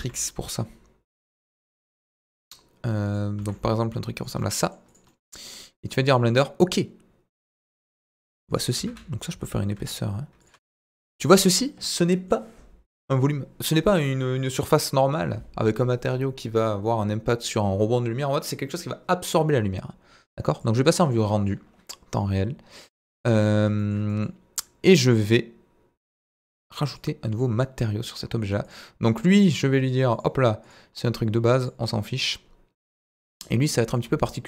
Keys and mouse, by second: 0.0 g, 0.0 middle click, 3.0 click, 3.4 s, 3.4 middle click, 4.2 click, 4.4-4.7 middle drag, 5.1 middle drag, 6.4-7.6 middle drag, 8.0 g, 8.0 middle click, 8.6 click, 8.8 Tab, 8.9 a, 9.8 e, 10.4 click, 10.5 Tab, 10.7 middle click, 11.9-12.3 middle drag, 20.6 click, 21.0-21.5 middle drag, 23.4-23.9 shift+middle drag, 24.1 middle click, 27.1 click, 30.3 click.